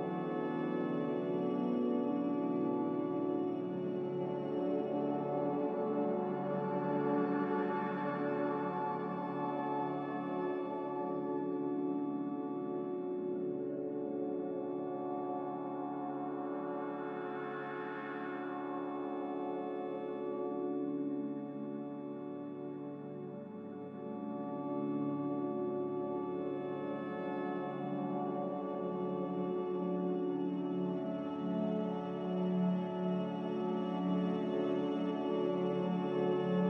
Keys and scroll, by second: 5.0 5, 5.2-7.4 Return, 16.1 1, 16.3 Return, 16.3 0, 22.4 ctrl+c, 31.7 m, 33.1 b.